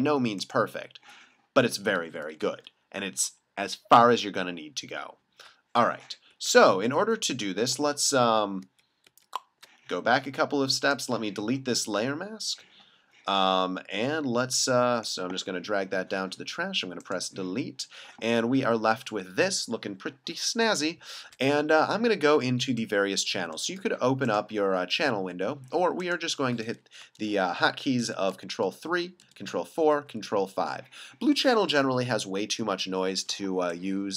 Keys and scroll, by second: 2.2 super+0, 6.3 super+z, 7.0 super+z, 8.3 alt+super+z, 22.7 space, 28.3 super+3, 29.2 super+4, 30.0 super+5, 31.8 super+=, 33.4 space.